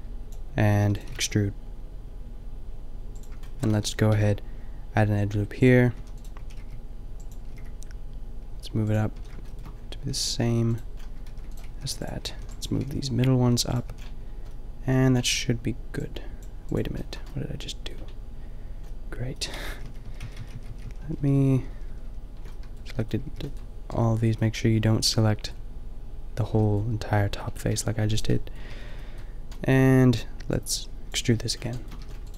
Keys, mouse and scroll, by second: 0.8 e, 1.1 g, 3.8 a, 4.2 ctrl+r, 6.4 a, 6.5 b, 7.6 g, 8.9 click, 9.1 a, 10.2 ctrl+r, 11.4 ctrl+r, 11.6-12.8 typing, 13.8 click, 13.9 a, 17.3 middle click, 19.6 ctrl+z, 19.8 ctrl+z, 19.9 ctrl+z, 20.1 ctrl+z, 20.3 ctrl+z, 20.4 ctrl+z, 20.6 ctrl+z, 20.7 ctrl+z, 20.8 ctrl+z, 21.0 ctrl+z, 21.2 ctrl+z, 21.3 ctrl+z, 21.5 ctrl+z, 21.7 ctrl+z, 21.8 ctrl+z, 22.0 ctrl+z, 23.2 b, 27.7 b, 28.2-30.0 drag, 28.7 b, 30.6 click, 31.1 b, 32.1 e.